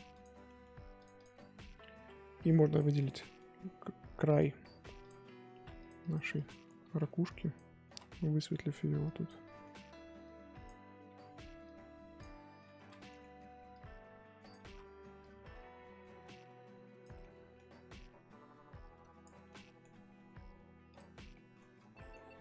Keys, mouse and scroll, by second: 0.1 click, 0.4 middle click, 0.9-2.7 drag, 3.2 middle click, 3.5 f, 5.0 click, 5.5 ctrl+z, 5.8-6.9 drag, 6.9 ctrl+z, 7.2 click, 7.8 ctrl+z, 8.5 click, 9.4 middle click, 10.2 click, 11.1 ctrl+z, 11.6 click, 12.4 middle click, 12.7 ctrl+z, 12.8 middle click, 13.7 click, 14.6 ctrl+z, 15.2-17.2 drag, 17.2 middle click, 18.0-19.6 drag, 19.6-20.9 middle drag, 20.9 click, 21.3 middle click, 21.7 scroll down 1, 21.9 middle click, 22.1-22.4 scroll up 1.